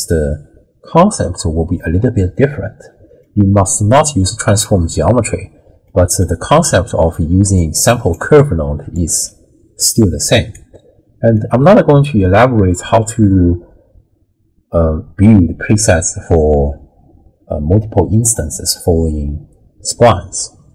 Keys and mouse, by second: 3.3 click, 5.8 click, 6.6-9.1 typing, 8.1 click, 10.3 d, 10.6 click, 11.3 d, 11.4 d, 12.1 d.